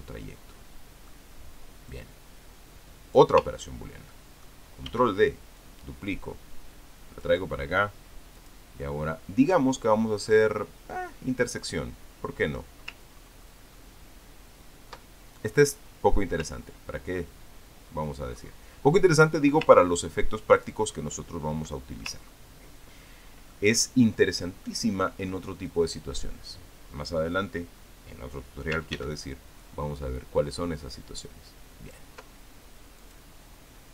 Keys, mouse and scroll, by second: 0.6 click, 1.3-2.3 drag, 2.7-4.2 drag, 4.4-4.7 ctrl+scroll down 1, 4.7 ctrl+click, 5.7 ctrl+d, 6.4-8.2 ctrl+drag, 9.2 click, 12.4 click, 13.9-14.7 ctrl+scroll up 2, 15.0-16.3 ctrl+scroll up 2, 16.4-17.2 scroll up 1, 17.9-18.8 ctrl+scroll down 3, 19.1-19.6 ctrl+scroll up 2, 20.5-21.6 ctrl+drag, 21.8-22.3 ctrl+scroll down 4, 23.1-23.4 ctrl+scroll up 2, 24.3 ctrl+click, 25.0 ctrl+scroll down 2, 25.3 ctrl+scroll up 2, 25.5 ctrl+click, 26.5 ctrl+click, 29.7 ctrl+d, 30.5-32.9 ctrl+drag, 33.8 click.